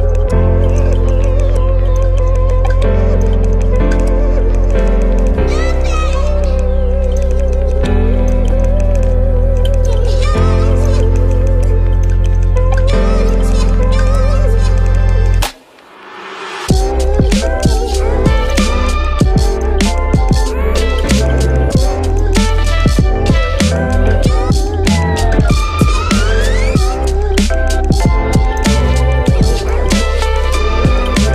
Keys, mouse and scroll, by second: 3.5 space, 14.4 space, 15.7 space, 17.1 ctrl++, 17.3 space, 17.6 ctrl+-, 22.0 ctrl++, 23.1 space.